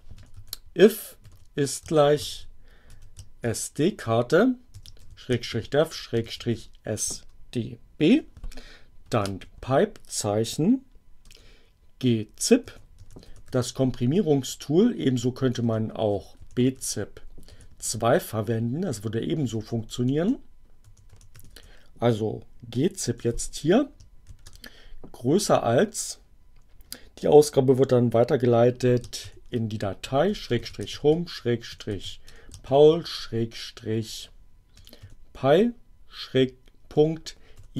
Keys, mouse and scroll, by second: 0.0-6.9 typing, 7.9 space, 9.0 alt+<, 11.2-13.8 typing, 14.9-17.2 typing, 19.2 BackSpace, 20.5-21.8 typing, 22.8 space, 24.0 shift+,, 25.2 space, 29.0-33.0 typing, 34.4-35.3 typing, 36.7-37.7 typing.